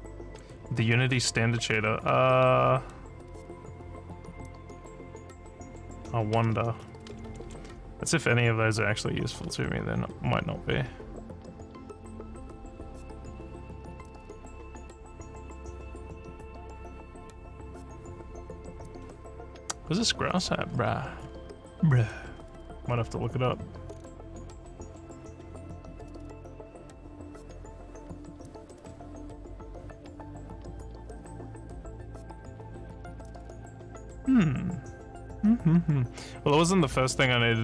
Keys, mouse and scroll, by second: 20.7-21.4 scroll up 7, 22.3 scroll up 1, 22.9 scroll up 1, 23.5 scroll up 1, 27.8 click, 28.9 scroll up 2.